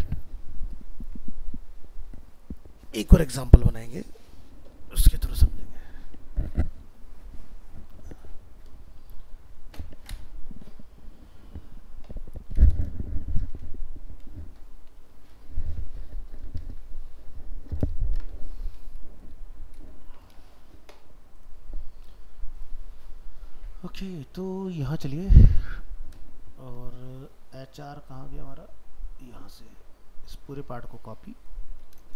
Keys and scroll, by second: 31.2 ctrl+c.